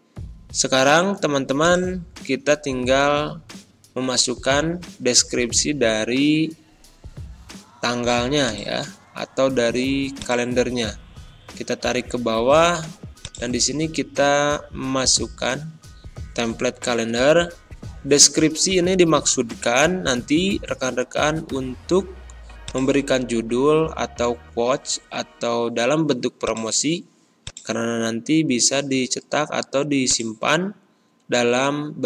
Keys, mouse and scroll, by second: 1.5 click, 2.2 ctrl+scroll down 1, 6.2-6.5 scroll down 1, 8.4-13.3 drag, 13.6-14.3 ctrl+scroll up 1, 17.2 scroll up 1, 18.3-18.8 ctrl+scroll up 1, 19.4 ctrl+scroll down 1, 22.6 click, 25.8 click, 26.4 click, 30.0-32.0 drag.